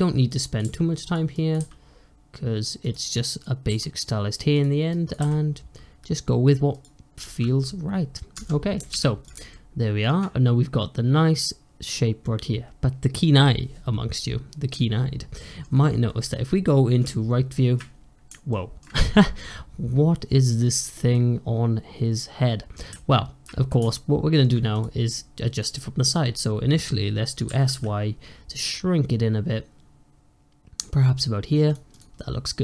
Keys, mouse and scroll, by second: 0.1 click, 0.5 g, 1.2 click, 1.4 g, 3.3 click, 3.6 g, 4.8 click, 5.1 g, 7.0 click, 7.6 scroll down 1, 7.9-8.2 scroll up 1, 8.2 Tab, 8.8 alt+z, 9.1 click, 9.4-12.5 shift+middle drag, 15.3-16.9 shift+middle drag, 16.9 `, 18.4-22.8 shift+middle drag, 23.7-24.6 shift+middle drag, 24.6 click, 27.4 s, 31.8 click, 32.1-32.6 middle drag.